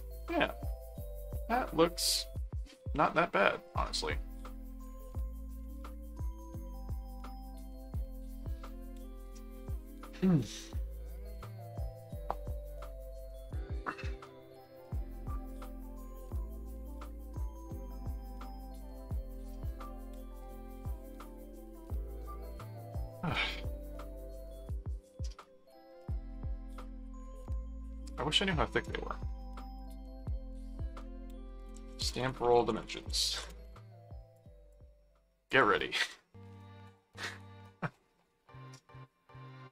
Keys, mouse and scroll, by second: 0.4 middle click, 1.5-5.4 middle drag, 5.6-7.5 middle drag, 23.3 middle click, 24.1 middle click, 25.2-26.3 middle drag, 27.0 middle click, 29.8 click, 31.5-33.7 typing, 34.4 click, 35.5 click.